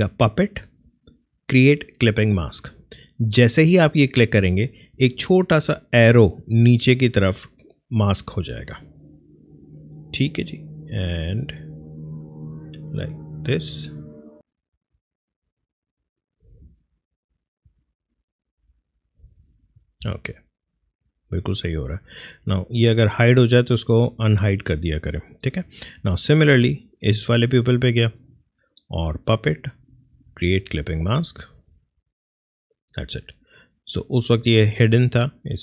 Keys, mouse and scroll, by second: 11.9 click, 12.1 click, 15.0 click, 18.7 Left, 20.7 click, 26.6 click, 29.0 click.